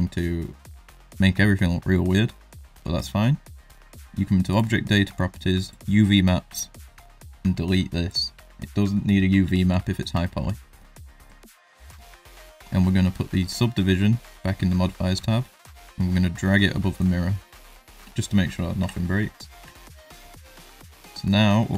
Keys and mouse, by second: 0.0 shift+middle drag, 0.4 middle click, 4.5 click, 5.7 click, 8.0 click, 8.7 middle click, 9.4 z, 10.2 shift+middle click, 10.7 middle drag, 11.7 click, 15.8-17.0 drag, 17.6 middle drag, 18.7 KP_1, 19.6 Tab, 20.2 middle click, 20.7 shift+middle click, 21.0 middle click, 21.5 ctrl+middle click.